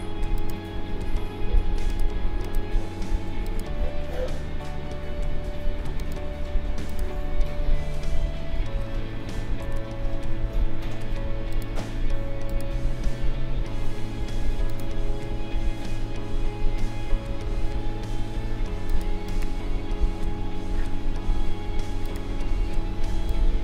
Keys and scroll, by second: 8.2 ctrl+0, 9.6 ctrl+s.